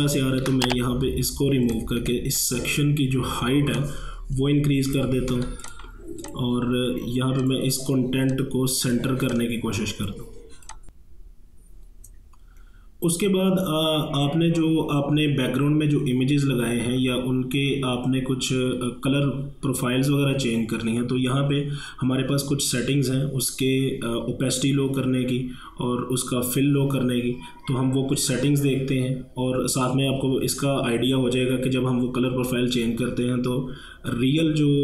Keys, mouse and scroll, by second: 2.0 a, 2.4-5.4 drag, 5.4 v, 5.6-10.7 drag.